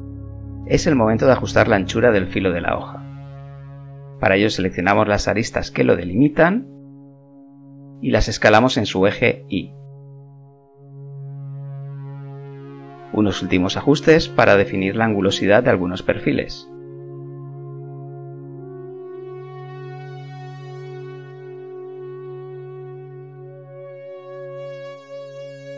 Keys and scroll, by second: 4.3 s, 6.6 KP_0, 9.6 s, 16.6 ctrl+z, 18.2 KP_0, 21.1 KP_0, 24.7 KP_1.